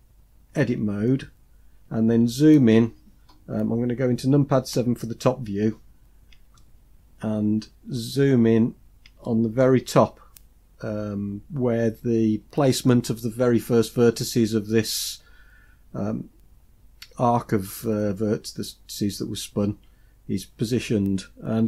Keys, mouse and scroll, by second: 0.4 Tab, 4.6 KP_7, 5.9-6.2 scroll down 1, 6.4-8.0 shift+middle drag, 8.3-8.9 scroll up 4, 9.1 shift+middle click.